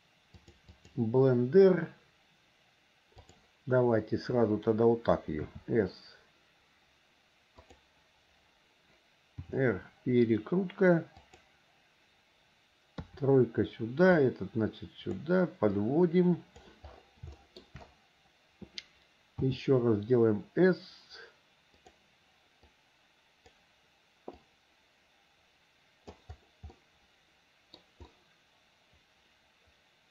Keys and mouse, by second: 1.0-3.6 drag, 5.6 s, 9.6 r, 13.2 KP_3, 14.3-15.3 drag, 16.0 click, 17.6 shift+middle click, 19.6 s, 22.9 click, 24.6-26.3 drag, 26.9-28.0 middle drag, 28.3-30.1 middle drag.